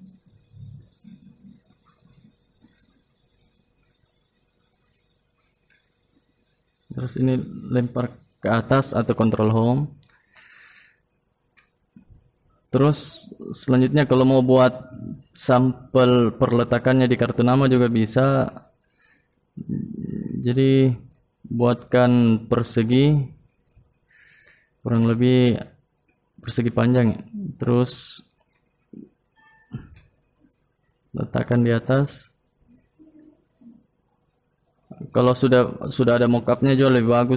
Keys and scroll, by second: 0.6 ctrl+Home.